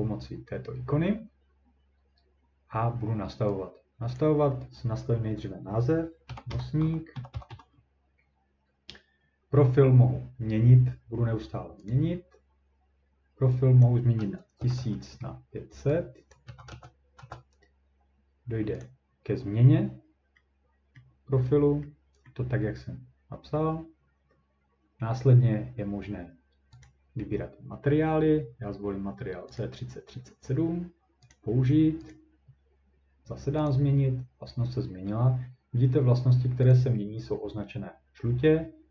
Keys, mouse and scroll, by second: 4.3-9.3 drag, 6.0-8.0 typing, 11.9-13.9 drag, 14.3-17.0 typing, 16.3 click, 18.8 click, 21.0 middle click, 22.2 scroll, 22.3 middle click, 22.5-23.8 scroll up 1, 26.8 click, 29.6 click, 31.3 click, 32.1 click, 33.7 click, 36.7 click.